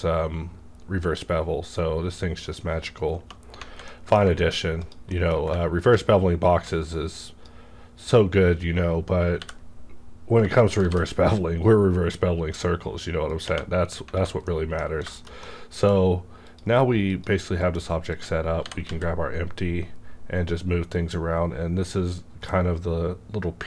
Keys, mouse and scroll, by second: 1.8 scroll down 1, 2.5 scroll up 1, 3.5 scroll down 1, 3.7 alt+a, 3.9 middle click, 4.4 shift+middle click, 4.7 click, 5.1 middle click, 6.4-10.7 ctrl+drag, 9.3 b, 10.8 shift+f, 10.8 b, 13.2 click, 13.3 click, 13.3 shift+f, 13.4 space, 14.1 alt+a, 14.4 middle click, 14.8-15.2 scroll down 2, 15.0 shift+middle click, 15.1 shift+middle click, 15.4-17.1 shift+middle drag, 16.4 click, 17.1 click, 17.4 scroll down 1, 17.5 click, 18.1 click, 18.6 g, 18.9 z.